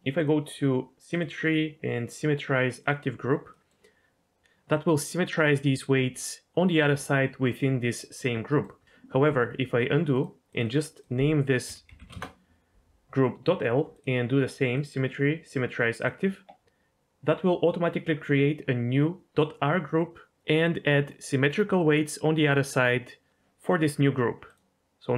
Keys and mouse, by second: 0.3-2.9 drag, 3.5 middle click, 8.5 middle click, 9.3 ctrl+z, 10.1 click, 10.6-12.1 drag, 14.0-16.1 drag, 24.5-25.1 drag.